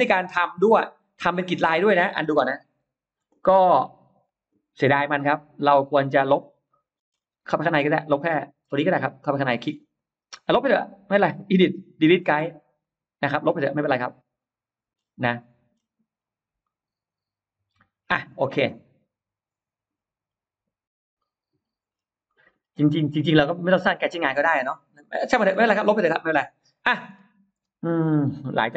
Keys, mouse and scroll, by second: 0.2-1.0 scroll up 2, 3.0 ctrl+z, 3.2 middle click, 4.9 click, 4.9 e, 5.4 click, 6.0-6.3 scroll down 1, 6.5 middle click, 6.9 scroll down 1, 7.2 scroll up 1, 7.2 space, 7.4 middle click, 7.8 click, 8.0 middle click, 8.0-8.4 scroll up 1, 8.8 click, 9.1 click, 9.4 click, 9.7 space, 9.8 click, 11.3 click, 12.6 click, 13.2-13.6 scroll down 2, 13.8-14.1 scroll up 2, 13.9 middle click, 14.8-15.1 scroll down 2, 15.4 middle click, 15.9 scroll up 2, 16.5-17.9 middle drag, 18.0 scroll down 2, 18.4-19.7 middle drag, 18.4 scroll up 2, 21.0 middle click, 21.2-21.6 scroll down 1, 21.8 scroll up 1, 24.7-25.0 scroll down 2, 25.0 middle click, 25.7-26.7 scroll up 4, 27.0 scroll down 2.